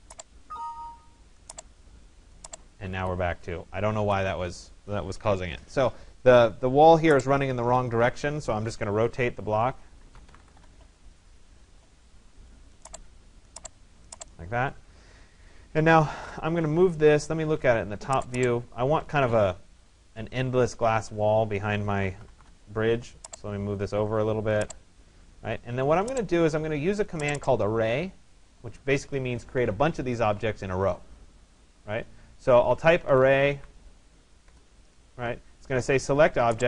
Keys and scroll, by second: 9.8-11.0 typing, 22.0 Return, 34.1 Return.